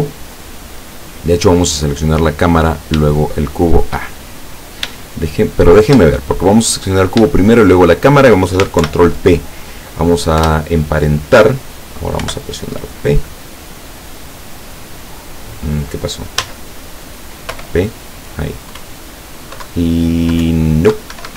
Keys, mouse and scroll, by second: 2.1 right click, 3.1 shift+right click, 4.1 shift+right click, 7.5 shift+right click, 8.9 ctrl+shift+p, 10.5 Return, 12.3 o, 16.4 z, 17.6 p, 18.9 Up, 19.7 Down, 20.5 Up, 21.2 Escape.